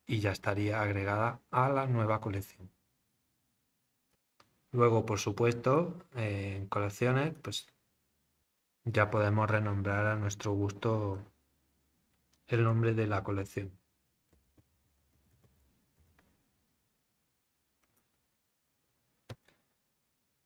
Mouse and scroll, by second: 5.5 click, 11.1 click, 17.8 click.